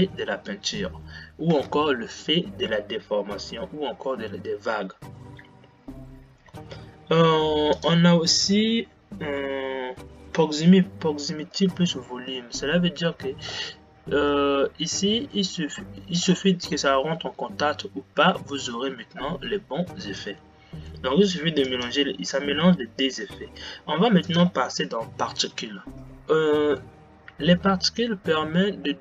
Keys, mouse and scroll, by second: 12.2 click, 14.7-24.6 middle drag, 24.6 click, 26.0 click.